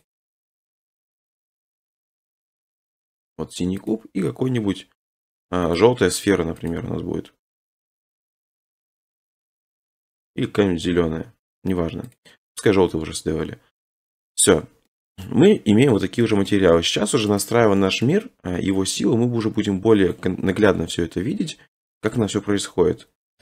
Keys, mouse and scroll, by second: 0.0 click, 1.1 click, 2.4 click, 3.1 click, 3.9 click, 5.8 click, 6.7 click, 7.8 click, 8.8 click, 9.4 click, 12.1 right click, 13.7-14.1 scroll, 14.3 scroll, 15.2 middle click, 15.6 middle click, 15.7 middle click, 16.5 middle click, 17.4 click, 17.4 scroll, 18.0-18.5 scroll, 20.2 click, 20.4 scroll, 22.2 click, 23.2 1.